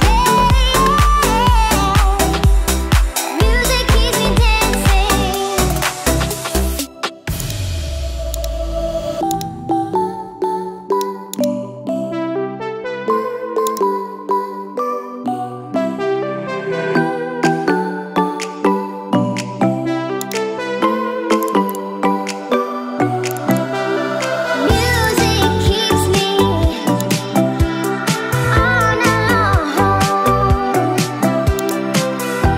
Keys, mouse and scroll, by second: 0.6-2.7 middle drag, 3.1 middle click, 3.9 Tab, 4.4-5.5 middle drag, 7.4 click, 8.4 click, 10.9 KP_Divide, 10.9 click, 17.2 ctrl+p, 21.4 click, 21.7 click, 23.3 click, 23.5 click, 25.0 click, 27.0 click, 31.6 click.